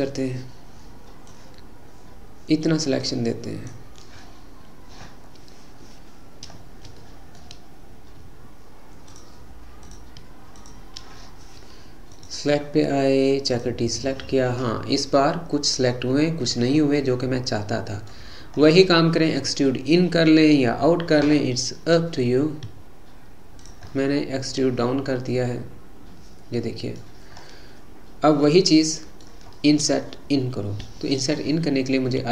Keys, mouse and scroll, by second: 1.4 click, 6.5-7.1 scroll up 1, 7.1-9.1 shift+middle drag, 9.1 shift+click, 9.9 shift+click, 10.6 shift+click, 12.2-14.6 drag, 14.6-15.7 scroll up 4, 15.7 scroll up 1, 16.6 scroll down 3, 17.0-18.5 middle drag, 18.5-18.9 scroll up 1, 20.2-22.8 scroll down 3, 22.8 e, 24.0-27.1 middle drag, 27.4 scroll up 3, 28.5-31.5 middle drag, 31.5-32.3 scroll up 2.